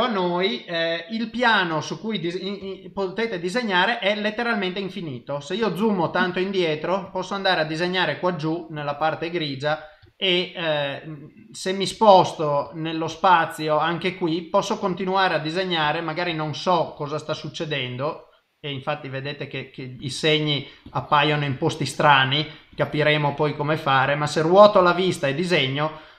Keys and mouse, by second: 2.6 KP_0, 10.9 middle click, 12.7 ctrl+middle click, 14.3 click, 15.2 click, 16.3 click, 16.9 click, 17.4 click, 17.9 middle click, 19.3 shift+middle click, 19.9 middle click, 20.8 click, 21.5 middle click, 22.7 click, 23.6 middle click, 24.8 click, 25.6 click.